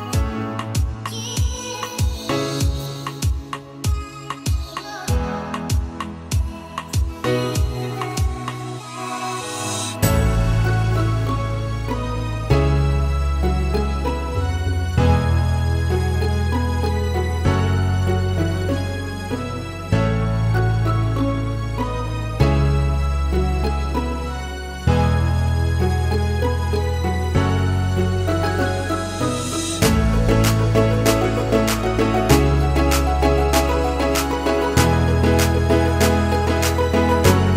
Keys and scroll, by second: 3.2 5, 3.4 Return, 15.2 Escape, 17.6 Escape.